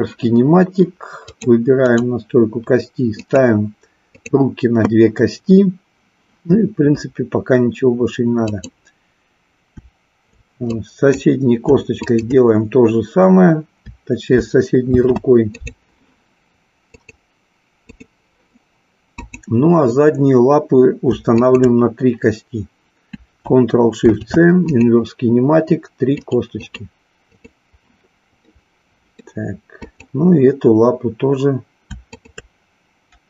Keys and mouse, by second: 1.3 click, 1.8 click, 3.3 click, 4.2 click, 8.6 click, 10.6-11.3 drag, 11.9-13.2 shift+drag, 15.7 ctrl+shift+c, 16.9 click, 17.8 click, 19.0-20.4 drag, 23.9 ctrl+shift+c, 27.4 click, 28.4-29.2 middle drag, 29.9-31.3 drag, 32.1-33.2 shift+drag.